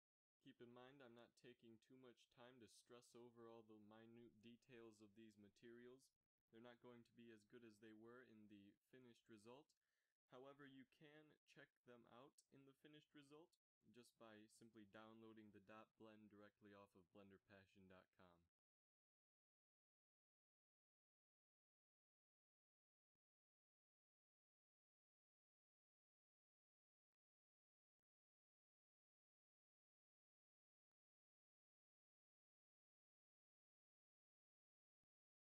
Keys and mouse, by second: 1.1 z, 1.2 z, 2.8-4.4 drag, 3.9 right click, 9.9-17.1 drag, 19.7-24.0 drag, 24.2-24.8 drag, 24.4 g, 31.4-31.9 drag, 31.9-33.0 middle drag, 33.0 click, 34.1 shift+z.